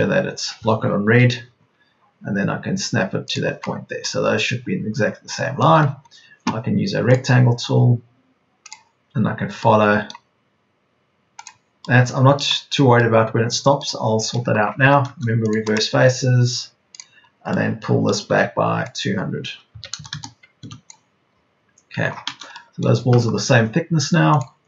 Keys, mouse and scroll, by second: 1.0 Right, 13.1 right click, 13.7 Right, 14.9 Right, 15.9 space, 18.3 p, 19.6 KP_2, 19.9 KP_0, 21.8 Escape.